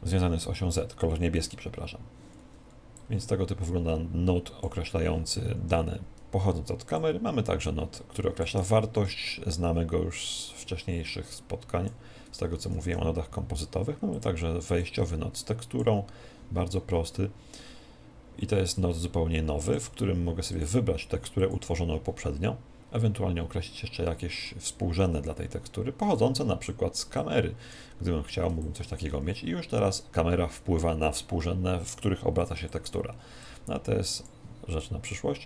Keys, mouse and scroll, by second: 21.4 click.